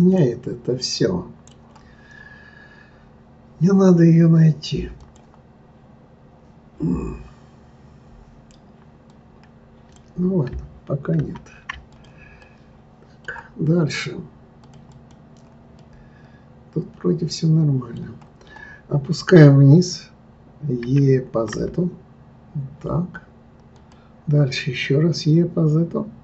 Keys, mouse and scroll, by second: 0.1-3.1 middle drag, 5.0 click, 9.1 click, 11.2 ctrl+z, 11.9 click, 12.4-14.6 middle drag, 14.6 click, 14.9 click, 15.8-18.8 middle drag, 20.8 e.